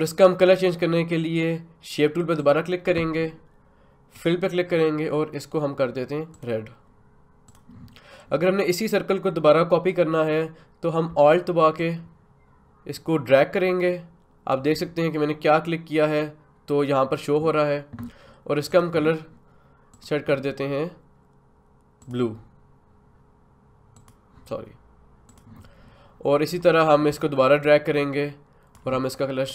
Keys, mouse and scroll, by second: 2.4 click, 11.8-18.7 alt+drag, 27.7-29.4 alt+drag.